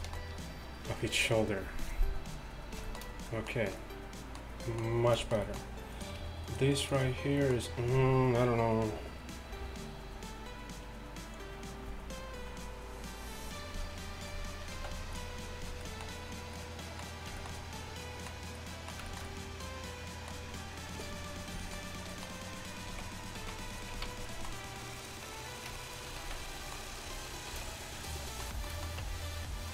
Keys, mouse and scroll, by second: 0.0 a, 0.2 a, 6.2-7.4 drag, 7.2 middle click, 7.7 click, 7.7-10.5 middle drag, 7.7 right click, 14.8 x, 22.9 z, 23.5 z, 24.0 z, 26.3 z, 27.6 shift+d, 29.1 Tab.